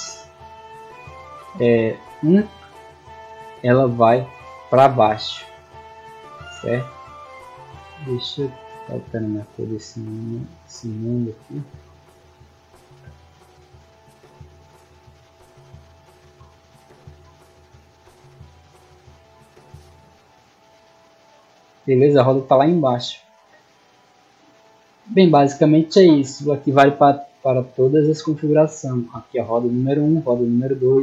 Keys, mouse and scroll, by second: 3.5-4.4 middle drag, 5.9-6.3 middle drag, 8.9 click, 9.6 click, 10.0-11.1 scroll up 3, 11.1 click, 12.0 click, 13.4 middle click, 14.2 click, 15.0 click, 17.4 right click, 18.9 click, 20.0 drag, 22.5 middle drag, 26.9 middle click, 27.7-28.6 ctrl+scroll down 4, 29.5 click, 30.3 click.